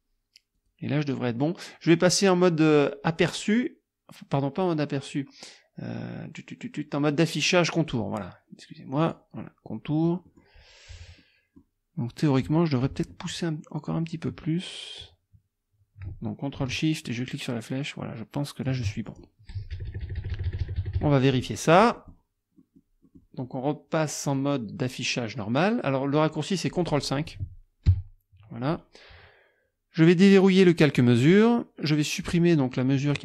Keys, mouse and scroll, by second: 0.6 click, 3.3 click, 9.0 click, 10.1-10.6 scroll up 1, 11.2-11.8 scroll up 1, 13.8 click, 16.7-18.9 ctrl+shift+drag, 19.1 ctrl+shift+click, 19.7 KP_Subtract, 21.7 click, 22.6 click, 23.1 click, 24.3 click, 26.8 click, 27.9 ctrl+KP_5, 31.2 click, 33.1 click.